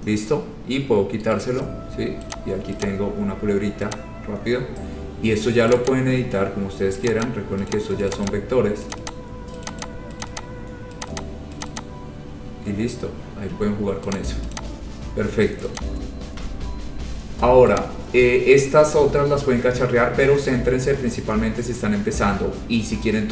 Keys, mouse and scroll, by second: 0.1 scroll down 2, 0.2-0.5 scroll up 3, 1.3 scroll, 1.5 right click, 2.5 click, 3.0 click, 3.0 scroll down 3, 3.2 scroll down 3, 3.5 scroll up 3, 4.1 click, 4.5 scroll down 2, 4.7-5.7 scroll, 5.9 click, 6.0 click, 7.2 click, 7.4 click, 7.8 click, 8.3 click, 8.4 click, 9.1 click, 9.2 click, 9.8 click, 10.0 click, 10.4 click, 10.6 click, 11.3 click, 11.4 click, 11.8 click, 11.9 click, 12.4-13.1 scroll, 14.3 click, 14.7 click, 14.9 scroll, 15.2 scroll down 10, 15.9 click, 16.5 scroll, 16.5 Delete.